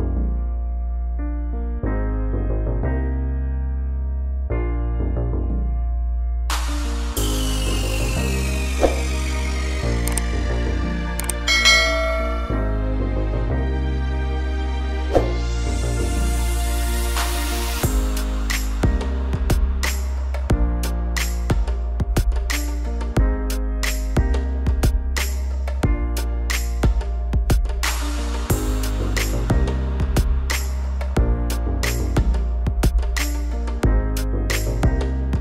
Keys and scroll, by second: 1.9 Delete, 2.9 ctrl+z, 3.5 Down, 4.8 Delete, 6.6 Down, 8.5 Delete, 11.0 ctrl+-, 30.2 ctrl++, 31.3 ctrl+-.